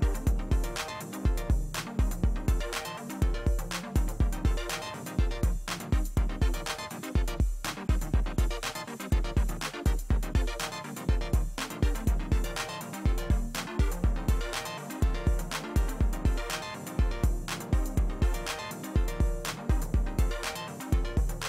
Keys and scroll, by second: 11.1 ctrl+d, 11.5 space, 13.4 space.